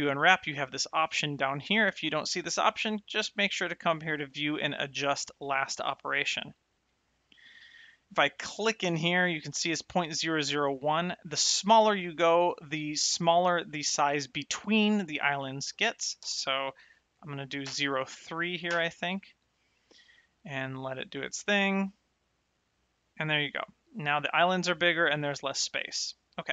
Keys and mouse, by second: 0.8 click, 3.5 click, 8.3 click, 10.2 click, 16.1 BackSpace, 17.6 KP_0, 26.4 click.